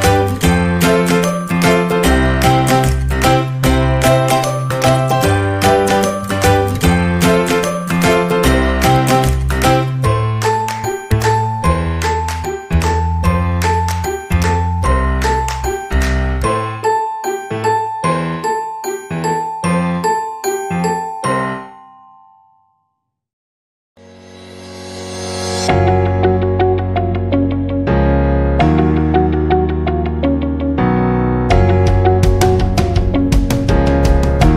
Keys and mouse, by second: 0.4 alt+right click, 0.8 g, 3.2 middle click, 3.9 shift+middle click, 4.5 middle click, 5.0 shift+middle click, 5.7-6.8 middle drag, 7.0 shift+middle click, 7.5 shift+middle click, 11.9 right click, 12.4 shift+right click, 13.8 shift+right click, 15.1 shift+right click, 15.9 x, 17.0 middle click, 19.3 ctrl+z, 19.9 right click, 20.2 shift+right click, 21.2 x, 26.3 right click, 26.8 shift+right click, 28.1 shift+right click, 28.7 g, 31.2 shift+right click, 31.5 shift+middle click, 32.0 middle click, 32.8 e, 34.2 middle click.